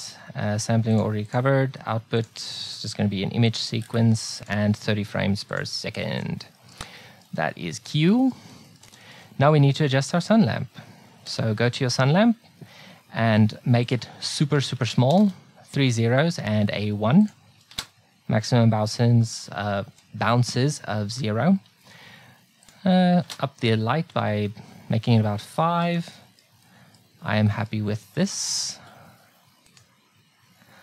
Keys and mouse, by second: 6.6 middle click, 8.4 middle click, 11.3-13.2 drag, 13.9-15.7 drag, 14.8 KP_0, 14.9 KP_0, 17.3-19.2 drag, 22.7-24.6 drag, 25.6 middle click, 26.7-27.7 middle drag, 28.2-29.7 right drag, 30.0-30.8 drag.